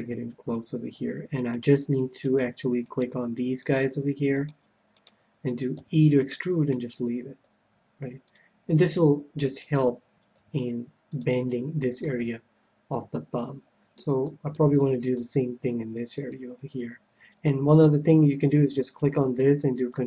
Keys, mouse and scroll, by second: 1.4-8.1 right drag, 5.7 e, 7.4 s, 8.3-10.2 drag, 9.8-11.2 right drag, 10.3 g, 11.2-12.7 drag, 12.0-13.6 middle drag, 14.1-16.5 middle drag, 16.1-17.8 right drag, 18.8-20.0 right drag.